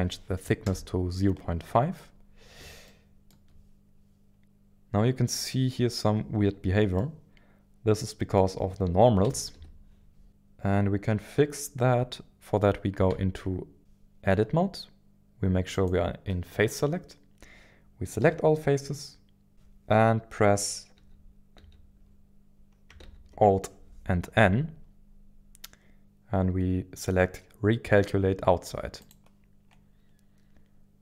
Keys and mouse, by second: 2.9 shift+middle click, 6.9-8.9 middle drag, 9.2 KP_1, 9.5 KP_1, 9.5 KP_7, 13.1 Tab, 15.7 click, 18.2 a, 19.5 KP_1, 19.5 KP_7, 21.5 n, 23.0 alt+n.